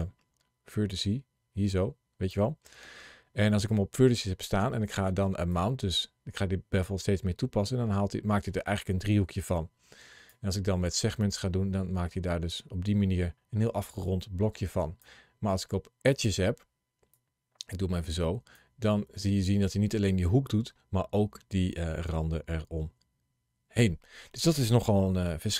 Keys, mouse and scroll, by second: 25.3 shift+middle click.